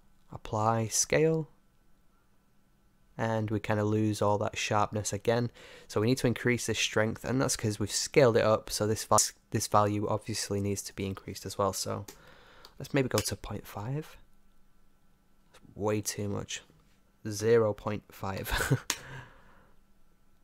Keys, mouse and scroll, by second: 3.5 middle click, 3.6-4.3 scroll up 1, 4.3-9.1 middle drag, 9.1-14.7 drag, 15.9-18.9 drag.